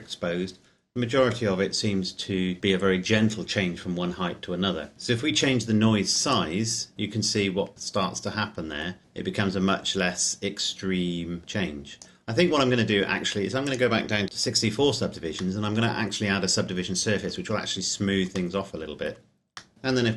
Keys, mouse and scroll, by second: 6.4 click, 14.2-15.4 scroll down 1, 15.7 middle click, 19.7-20.1 scroll down 1.